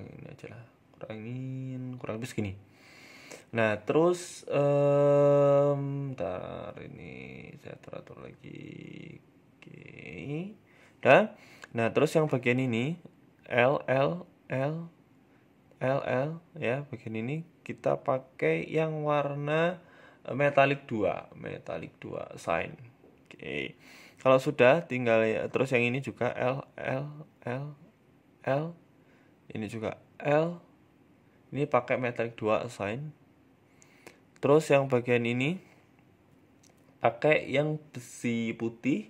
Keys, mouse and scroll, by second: 1.6 shift+middle click, 1.9 middle click, 2.3 scroll up 1, 3.1 click, 3.6 click, 6.3 click, 8.7 click, 10.1 shift+middle click, 10.3 middle click, 10.9 Tab, 11.3 a, 11.4 a, 12.7 l, 13.1 l, 15.0 l, 15.4 l, 17.2 shift+l, 18.2 scroll up 2, 19.2 scroll up 3, 19.2 click, 19.8 click, 21.8 click, 22.1 middle click, 22.3 Tab, 22.6 shift+middle click, 23.0 middle click, 23.4 shift+middle click, 23.6-24.1 scroll up 1, 24.1 shift+middle click, 24.4 Tab, 24.8-26.8 typing, 28.6 shift+middle click, 30.4 l, 31.5 click, 31.8 shift+middle click, 32.0 Tab, 32.2 scroll down 1, 32.4 shift+middle click, 33.1 middle click, 33.6 shift+middle click, 34.4 middle click, 34.9 middle click, 35.0 shift+middle click, 35.3 right click, 36.2 click, 36.6 click.